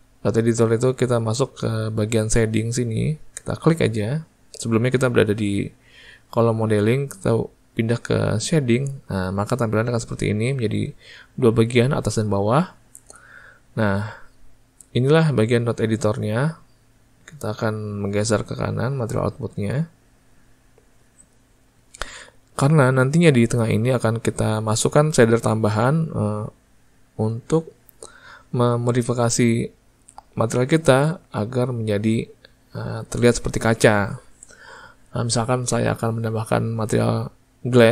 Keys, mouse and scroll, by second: 17.2-37.9 drag.